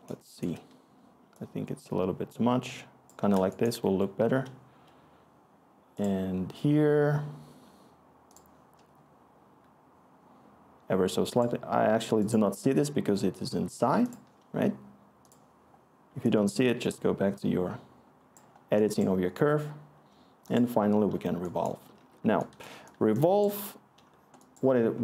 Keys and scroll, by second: 21.7-22.8 scroll.